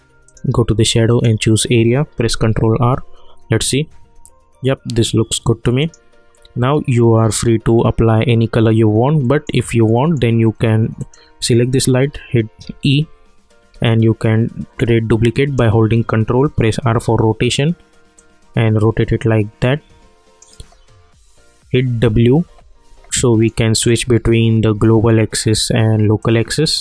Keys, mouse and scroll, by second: 2.2 ctrl+r, 5.8 click, 9.2 middle click, 11.0 click, 12.0-13.2 typing, 13.9-16.5 ctrl+drag, 16.5 r, 18.2-20.6 drag, 20.6 w, 22.4 w, 22.8 w, 23.5 click, 26.7 click.